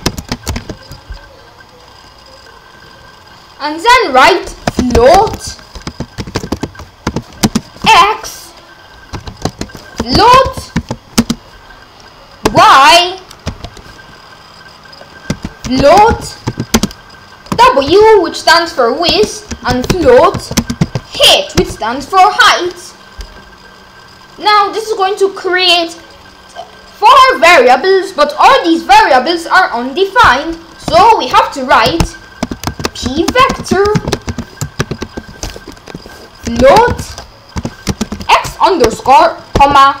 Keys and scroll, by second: 0.0-0.5 typing, 0.4 Return, 4.7 Return, 4.9-7.8 typing, 9.2-11.2 typing, 9.6 Return, 12.8 y, 13.4 ;, 15.4-17.9 typing, 19.1 Return, 19.3-21.6 typing, 30.9 Return, 32.4 Return, 32.6-38.9 typing, 35.8 Left, 39.9-40.0 typing.